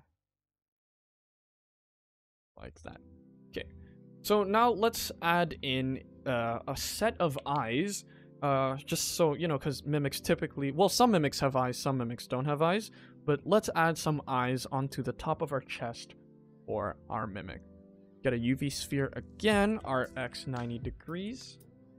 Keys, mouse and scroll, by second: 2.6 click, 2.8 middle click, 3.1-3.4 scroll down 1, 3.4 ctrl+s, 3.6 middle click, 3.9 shift+middle click, 4.2 middle click, 4.7 scroll down 1, 4.9 shift+middle click, 5.5 ctrl+s, 5.9 middle click, 12.0 scroll up 2, 12.2 scroll down 1, 12.4 middle click, 12.8 ctrl+s, 13.0 middle click, 14.2 shift+middle click, 14.8 ctrl+s, 15.5 shift+middle click, 16.2 shift+a, 17.9 s.